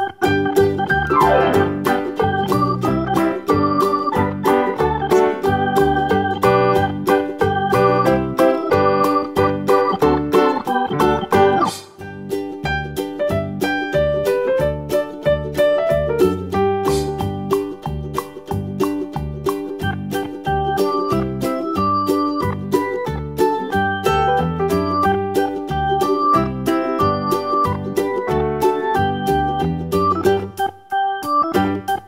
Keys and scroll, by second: 21.0 Left, 21.3 Left, 21.6 Left, 31.1 Right, 31.6 Right.